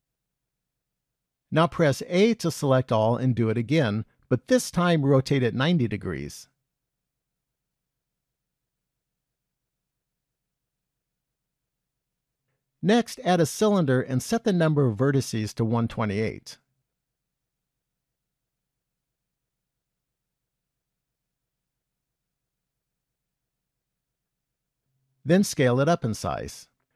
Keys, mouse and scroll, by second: 2.1 a, 3.9 shift+d, 8.2-9.5 scroll down 3, 9.5 middle click, 12.2 shift+a, 16.2 click, 17.8 click, 21.8 click, 22.9 KP_1, 24.5-26.3 scroll up 3, 26.3 s.